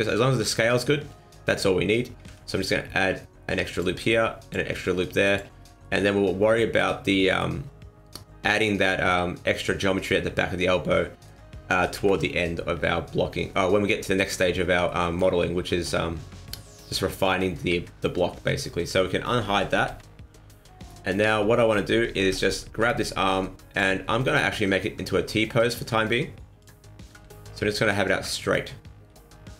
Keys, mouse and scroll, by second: 1.1-1.6 scroll down 2, 1.4-1.8 scroll up 3, 2.2 ctrl+r, 4.1 ctrl+r, 5.6 scroll down 3, 5.8 middle click, 7.1 middle click, 8.7 scroll up 1, 8.8 middle click, 10.1 middle click, 11.9 KP_1, 14.4-15.0 scroll up 2, 14.8 shift+middle click, 15.2-17.5 scroll down 2, 17.6 a, 19.7 alt+h, 20.8 right click, 22.2 l, 23.0 click, 24.5 r, 27.1 g.